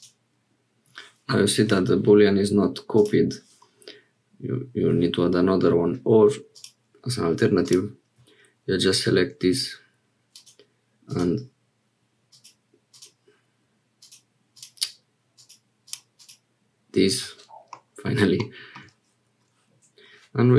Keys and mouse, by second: 6.5 click, 7.6 click, 17.7 middle click.